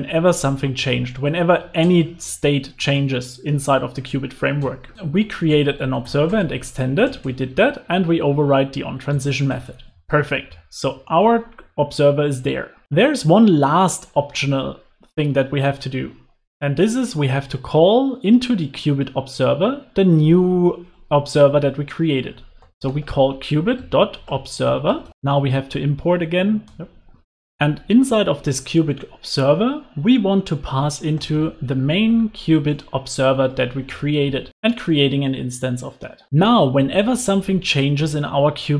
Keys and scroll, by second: 0.2 super+s, 1.9 alt+shift+Right, 5.2 alt+shift+Right, 7.5 super+x, 9.6 super+s, 10.0 alt+super+l, 10.3 super+s, 26.5 Return, 27.5 super+s, 32.8 Return, 34.6 super+s, 35.0 alt+super+l, 35.2 super+s.